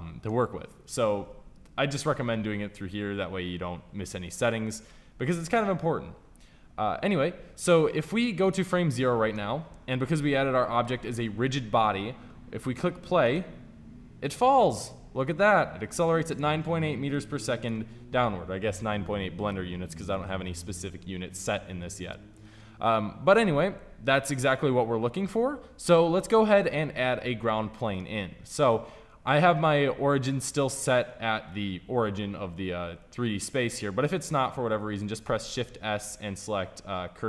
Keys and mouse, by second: 8.4-10.8 drag, 13.2-21.5 drag, 27.3-32.2 middle drag, 35.1 shift+s.